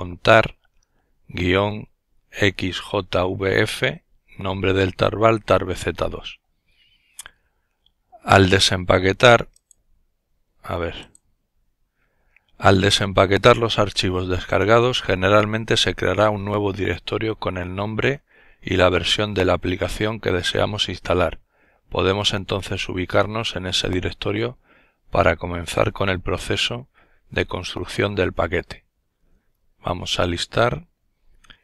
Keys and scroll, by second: 28.3-29.0 typing, 29.2 Return.